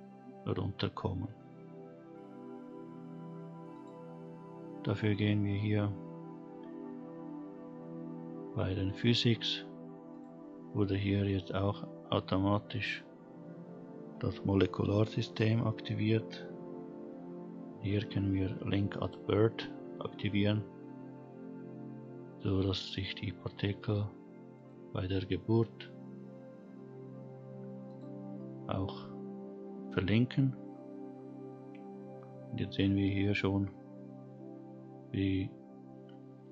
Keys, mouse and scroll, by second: 0.0-1.3 scroll down 3, 3.8 click, 4.4-6.2 scroll up 1, 6.2-6.8 scroll up 2, 10.1 click, 19.0 click, 24.5 click, 27.8 click, 28.8 scroll up 2, 30.8-31.8 scroll down 4, 35.0 scroll up 1.